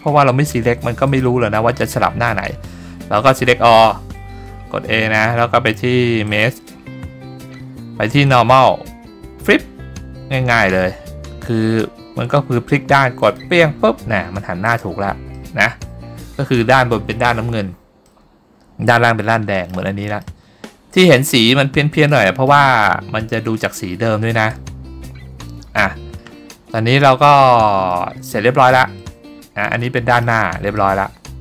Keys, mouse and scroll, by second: 1.2 click, 3.5 a, 6.4-13.6 drag, 14.8 click, 15.5 middle click, 18.2-19.8 middle drag, 20.3 middle click, 22.2 middle click, 24.6-25.9 middle drag, 28.0 middle click, 29.1-30.3 middle drag, 30.9 middle click.